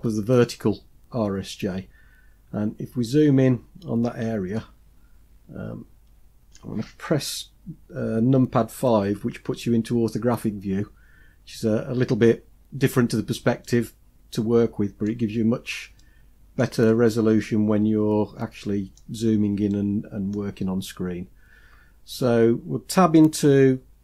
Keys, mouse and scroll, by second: 2.6-4.4 scroll up 3, 4.4-6.4 middle drag, 9.1 KP_5, 13.5-15.2 middle drag, 15.3 scroll up 2, 15.9-16.5 shift+middle drag, 16.7-18.9 middle drag, 19.6-22.3 middle drag.